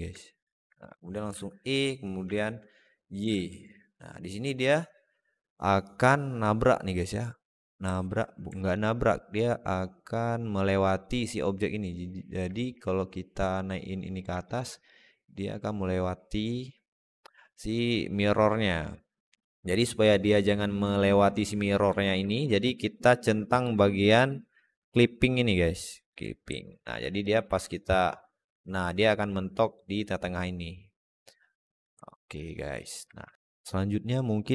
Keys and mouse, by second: 0.0 alt+middle click, 1.1 e, 7.7 alt+middle click, 8.4 alt+middle click, 9.0-11.9 drag, 12.4 alt+middle click, 13.3 click, 14.3 alt+shift+middle click, 14.8-21.8 drag, 22.1 alt+middle click, 25.9 click, 26.4 alt+middle click, 27.1-29.6 drag, 30.3-31.5 drag, 31.9 alt+middle click, 32.3 alt+shift+middle click, 32.7 alt+middle click, 33.1 Tab.